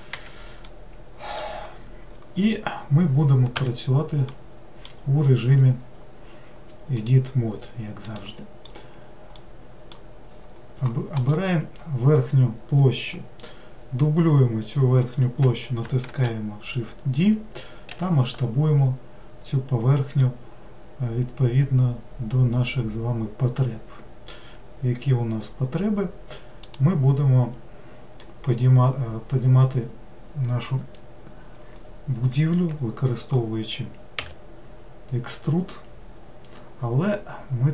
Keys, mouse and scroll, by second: 0.2 n, 0.7-3.5 middle drag, 3.5 Tab, 4.3-7.0 middle drag, 7.0-8.6 drag, 8.6-9.4 scroll up 1, 9.4-11.2 middle drag, 11.2 click, 16.1 shift+d, 34.2 e.